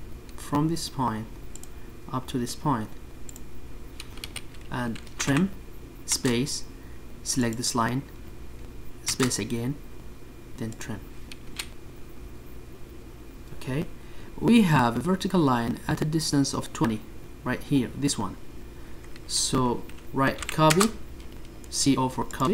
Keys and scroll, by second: 0.0 Escape.